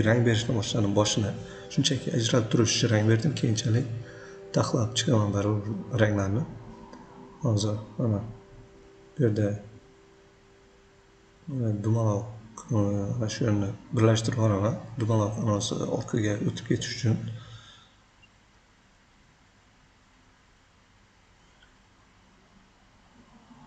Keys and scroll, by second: 13.3 v.